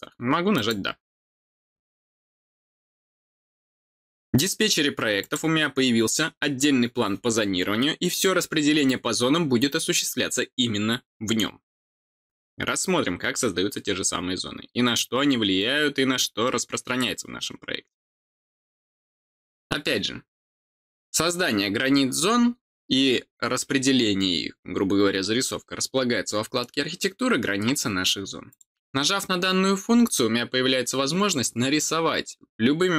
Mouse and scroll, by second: 0.5 click, 5.2 click, 28.5 click.